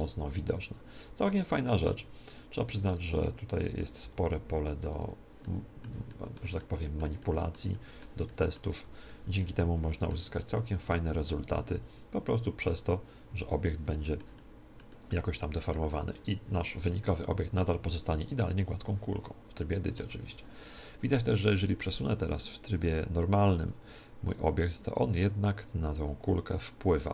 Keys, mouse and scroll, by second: 0.0 g, 1.3 middle click, 1.8 middle click, 4.0 g, 5.0 click, 5.0 middle click, 8.8 Tab, 8.8-12.1 middle drag, 11.7 s, 13.9-16.7 middle drag, 16.8 right click, 17.0 Tab, 17.9 click, 18.4-19.8 middle drag, 20.0 Tab, 20.7-22.0 right drag, 21.1 click, 22.0 middle click, 22.8 click.